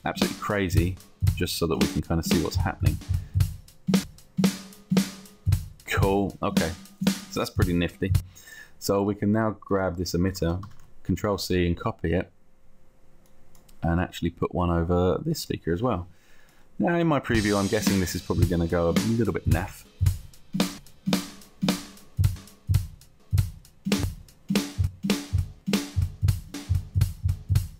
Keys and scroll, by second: 10.6 ctrl+c, 10.9 ctrl+v.